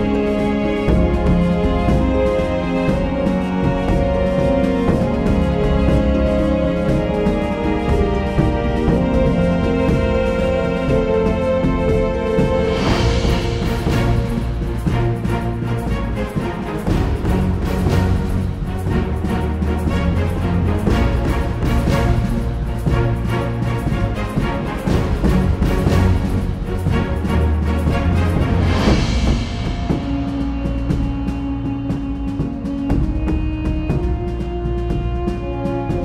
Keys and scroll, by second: 0.6 [, 0.7 [, 5.1 ], 5.6 ], 24.4 Return, 29.6-31.5 typing, 32.5 typing, 33.3 super+z.